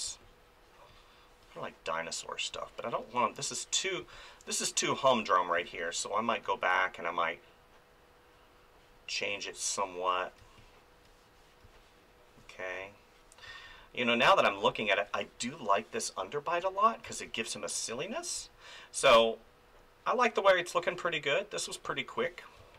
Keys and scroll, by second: 0.0 space, 2.5 space, 10.4 space, 13.4 space, 16.6 ctrl+z, 17.0 space, 22.6 space.